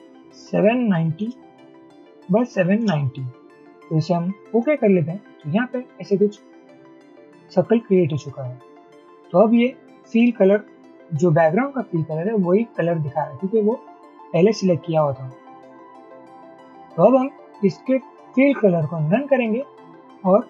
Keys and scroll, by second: 0.6-1.3 typing, 2.1 Tab, 2.5-2.9 typing.